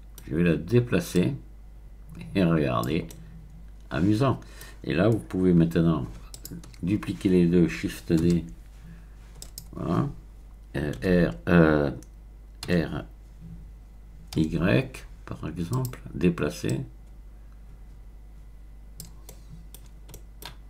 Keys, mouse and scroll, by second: 0.1 middle click, 1.1-3.1 drag, 3.1-5.1 middle drag, 6.3 shift+click, 8.2 shift+d, 9.4 click, 11.0 t, 12.7 r, 14.3 y, 15.7 click, 16.7-19.3 drag, 19.3 middle click, 19.5 scroll up 1, 19.7-20.6 scroll down 1.